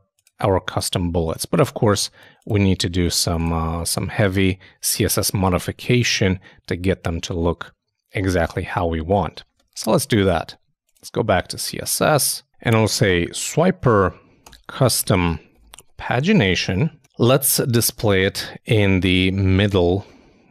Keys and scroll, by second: 9.5 super+Tab, 19.0 super+Tab.